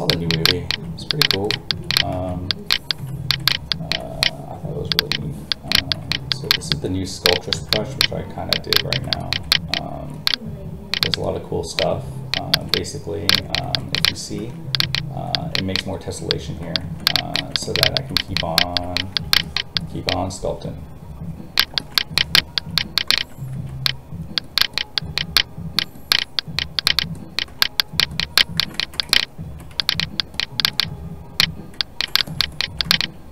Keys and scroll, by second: 2.1 alt+a, 23.5 alt+a.